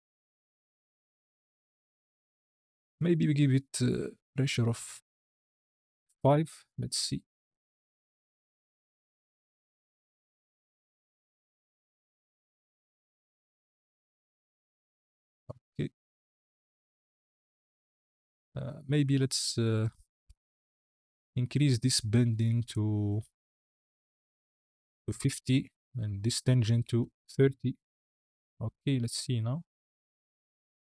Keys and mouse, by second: 2.5 space, 4.8-6.2 drag, 7.1 click, 7.5 click, 8.0 space, 17.6 space, 22.6-25.3 drag, 25.9-27.4 drag, 29.4 click, 30.3 space.